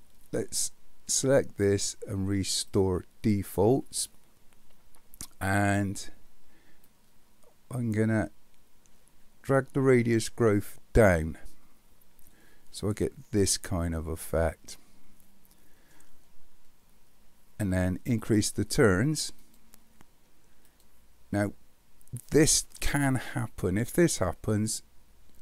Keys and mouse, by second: 1.2-3.3 drag, 6.9-11.1 drag, 12.9-15.9 middle drag, 19.4 click, 20.7 click, 24.8-25.4 drag.